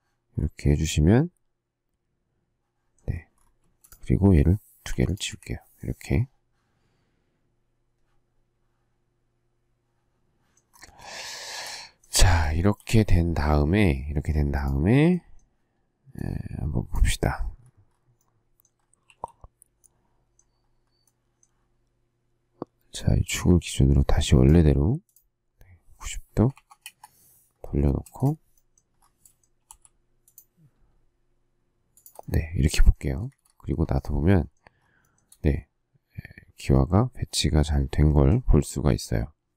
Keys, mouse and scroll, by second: 3.6 space, 4.9 Delete, 5.2 Delete, 11.3 shift+middle click, 12.6 shift+middle click, 19.0 q, 26.2-28.0 typing, 29.6 m, 31.9 shift+click, 33.1 space, 33.3 Escape, 35.0 shift+middle click.